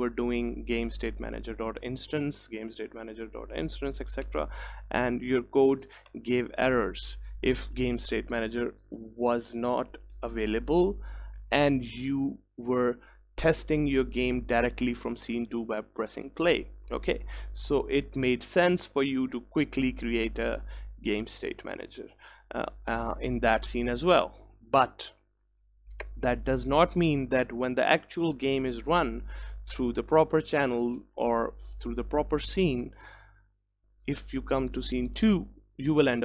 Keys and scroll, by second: 4.4 Return, 6.1 Return, 11.6 ctrl+s.